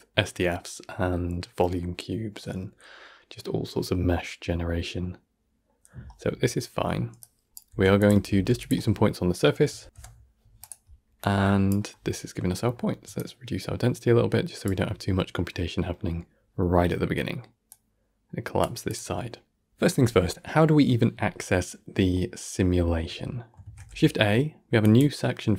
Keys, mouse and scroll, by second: 6.2 scroll down 2, 6.7-7.1 middle drag, 7.1-8.2 drag, 8.2 shift+a, 12.6-13.0 scroll up 1, 13.0-15.2 shift+drag, 15.2-15.5 scroll down 1, 15.5-17.6 middle drag, 17.6-19.1 drag, 19.1 middle click, 20.0 ctrl+s, 22.0-23.5 ctrl+middle drag, 23.5 shift+a.